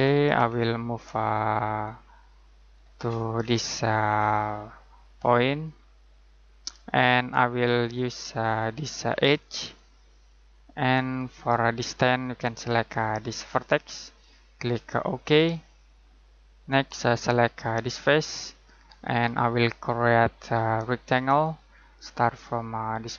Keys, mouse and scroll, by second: 1.8 click, 2.9-5.6 scroll down 1, 5.6 click, 16.3 middle click, 17.8 click, 18.5-20.4 scroll down 1, 20.4 click.